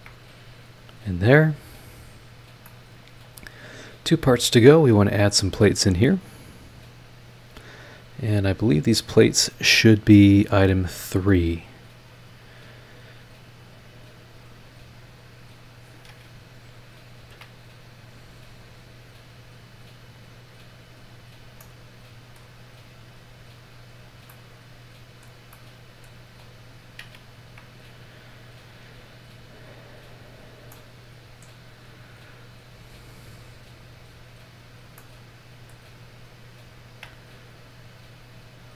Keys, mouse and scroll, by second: 0.9 click, 2.2 click, 2.6-3.5 middle drag, 3.5 scroll down 1, 4.4-4.7 scroll up 1, 8.5-10.4 drag, 12.0 click, 14.2 click, 15.1 click, 17.2 ctrl+click, 18.5 click, 20.0 click, 20.4-20.7 scroll down 2, 21.0-21.4 scroll up 2, 21.6 click, 21.6 right click, 22.8 scroll up 2, 23.7 click, 24.0 scroll down 2, 24.3-25.4 middle drag, 25.5 middle click, 26.3-26.6 scroll up 2, 27.3 ctrl+click, 28.7 click, 29.4 scroll down 2, 30.3 click, 30.7-31.4 middle drag, 31.4 scroll down 2, 32.1-33.1 scroll up 4, 33.8 click, 34.3 scroll down 2, 34.9 scroll down 2, 35.0-35.9 middle drag, 35.9-36.3 scroll up 2, 36.8 ctrl+click, 38.2 click.